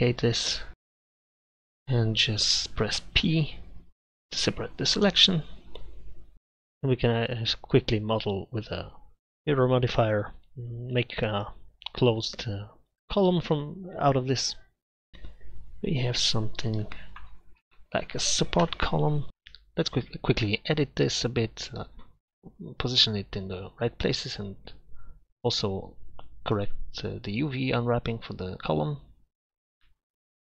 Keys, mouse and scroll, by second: 0.0 t, 6.3 shift+s, 11.5 Tab, 13.2 click, 13.7 click, 14.9-15.4 middle drag, 18.6 KP_Divide, 19.4 r, 19.9 g, 23.5 shift+d, 23.9 r, 25.5 shift+s, 25.6 r, 26.2 Tab, 26.5 ctrl+r, 27.0 a, 27.1 ctrl+r, 27.5 Tab, 27.5 z, 27.7 Tab, 27.8 middle click, 28.0 middle click, 28.1 Tab, 28.2 u, 28.7 Tab, 28.9 Tab, 29.1 u.